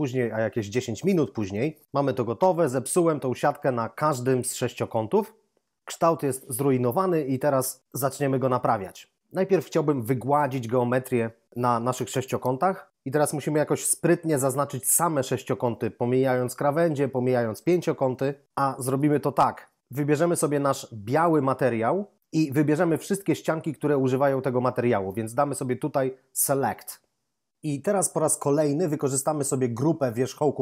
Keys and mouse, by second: 5.9 0, 18.6 ctrl+Up, 21.0 click, 26.6 click.